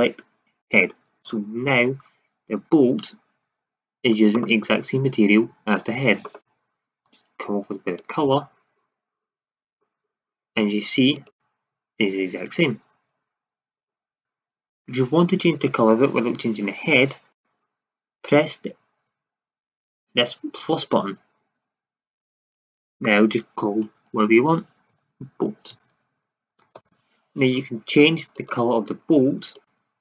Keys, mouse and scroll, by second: 2.9 shift+z, 7.9-8.9 drag.